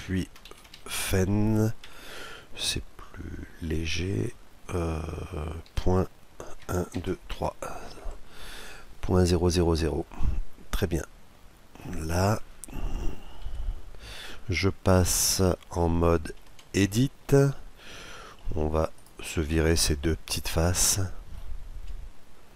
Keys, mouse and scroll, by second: 6.6 KP_0, 9.8-11.8 middle drag, 13.1 KP_Decimal, 16.1 Tab, 16.9-19.4 middle drag, 18.6-20.3 right drag, 20.3-22.0 middle drag, 22.3-22.5 right drag.